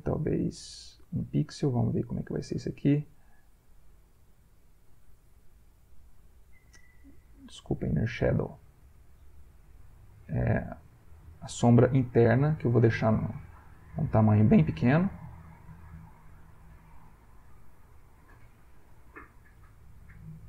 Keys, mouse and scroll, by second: 7.3 click, 8.2 click, 12.5-14.5 drag, 18.2-20.0 drag.